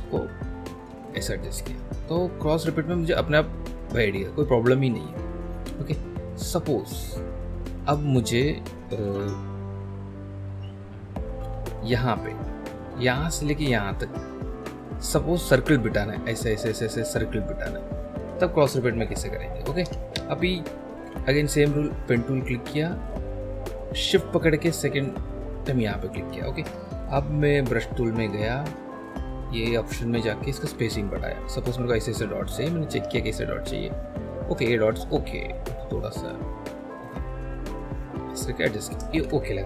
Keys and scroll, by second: 11.4 F1, 11.8 F2, 19.9 Escape, 20.9 b, 23.3 p, 27.2 shift+b, 34.7 ctrl+z, 39.1 ctrl+z.